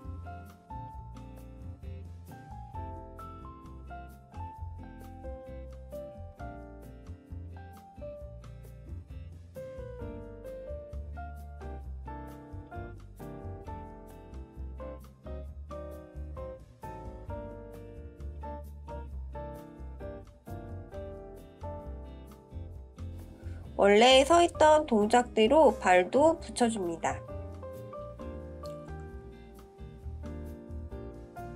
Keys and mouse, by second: 2.4 click, 3.3-5.3 drag, 9.0 click, 11.1 click, 14.0 click, 21.8 shift+middle click, 23.9-26.8 drag, 30.4 click, 31.4 ctrl+z.